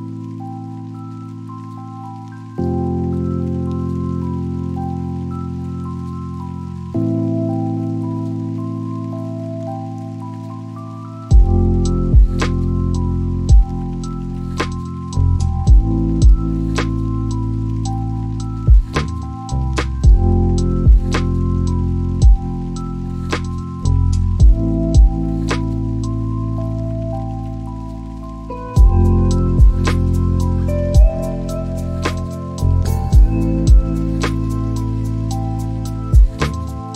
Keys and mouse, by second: 13.4 Escape, 14.7 click, 20.4 g, 29.4 click, 32.1 g.